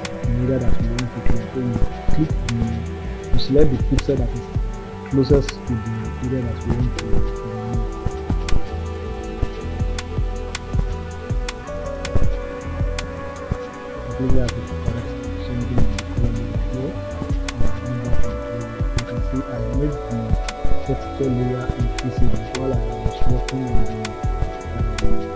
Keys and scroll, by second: 1.7 b, 3.3 [, 7.2 ctrl+z, 12.1 ], 23.5 ].